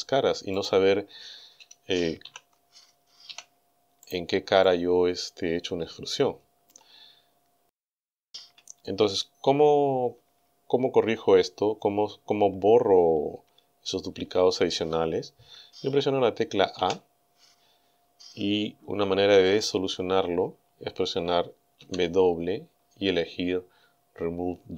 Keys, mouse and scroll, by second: 0.6 middle click, 2.3 ctrl+z, 3.3 e, 4.1 right click, 4.6-6.9 middle drag, 7.3 scroll down 2, 8.5 a, 16.8 a, 21.8 w.